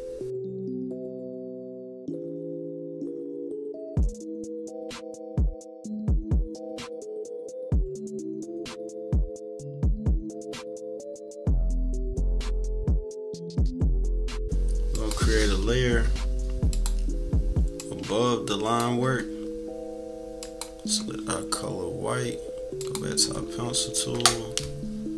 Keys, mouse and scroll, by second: 1.3 scroll up 1, 1.3 -, 1.3 scroll down 1, 1.4 =, 1.9 click, 2.8-4.0 typing, 2.9 scroll up 2, 3.1 scroll down 1, 3.3 scroll up 2, 3.6 scroll down 2, 4.1 scroll up 2, 4.7 click, 5.4 click, 5.8 click, 6.3 click, 7.4 click, 8.3 -, 8.9 =, 9.2 -, 9.4 =, 9.9 click, 10.3 click, 10.8 shift+click, 11.2 click, 11.5 click, 12.0 click, 12.5 click, 12.8 click, 13.1 ctrl+-, 13.5 ctrl+-, 13.6 scroll down 2, 13.7 ctrl+=, 13.9 scroll up 2, 14.9 click, 16.7 click, 17.8 click, 19.0 =, 20.4 click, 20.9 scroll up 1, 22.8 click, 23.3 =, 23.5 =, 23.6-24.2 scroll down 2.